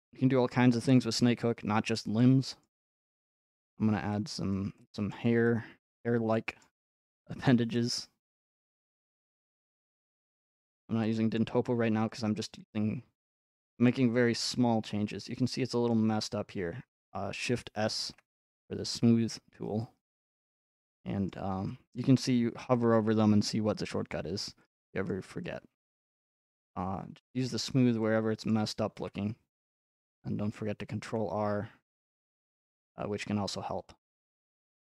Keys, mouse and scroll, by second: 0.0 middle click, 0.0 middle click, 0.2 middle click, 0.8 middle click, 1.2 f, 2.0 click, 2.6 middle click, 3.7 click, 4.5 click, 5.1-5.5 scroll down 1, 5.9 click, 6.7 scroll down 1, 7.3 click, 8.0 middle click, 9.4 click, 9.9 middle click, 10.1 scroll up 1, 10.6 click, 11.4-11.9 scroll up 1, 12.6 click, 13.5 click, 14.7 click, 14.9 middle click, 15.9-18.1 middle drag, 20.5 click, 20.6-22.0 middle drag, 22.0 click, 25.1 click, 25.3 middle click, 27.4 scroll, 28.5-28.9 scroll, 31.3-32.4 middle drag, 31.3-32.6 scroll up 6, 32.5 middle click, 32.6 middle click, 33.4-34.8 middle drag.